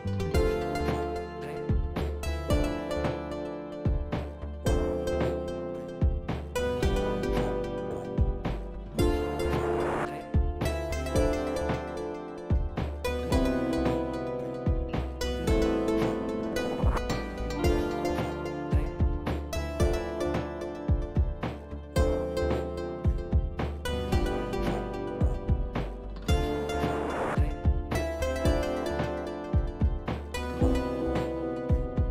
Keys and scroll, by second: 0.0-3.5 typing, 5.2 w, 6.2-7.0 typing, 8.7-9.9 typing, 14.4 Left, 14.6 Left, 14.9 Left, 15.0 Left, 15.3 Left, 15.5 Left, 15.7 Left, 15.9 Left, 19.1 F5, 24.6 ctrl+c, 26.5 ctrl+v, 30.6-32.1 typing.